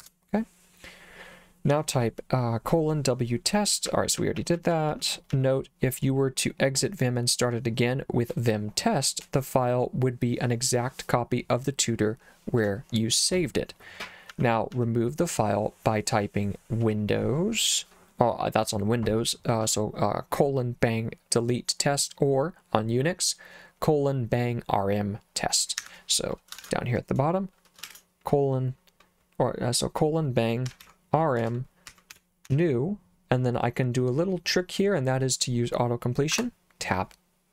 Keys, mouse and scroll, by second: 0.0 Return, 3.9-5.3 typing, 14.3 j, 14.8 j, 15.3 j, 25.8 Escape, 26.6 shift+;, 27.9 shift+1, 30.4-33.0 typing, 36.4 Tab.